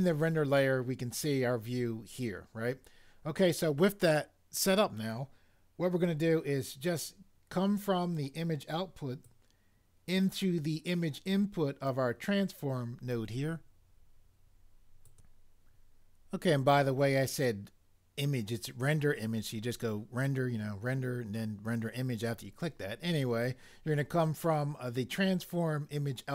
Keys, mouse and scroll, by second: 9.3 right click.